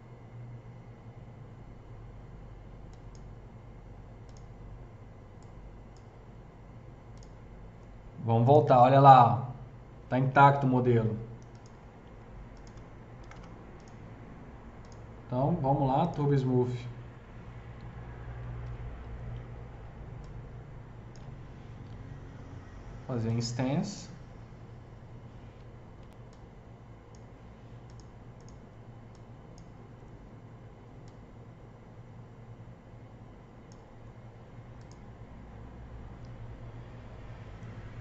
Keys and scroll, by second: 10.5 4, 10.8 4, 11.5 3, 12.4 F3, 13.0 F3, 13.1 F4, 18.5 w, 25.9 s.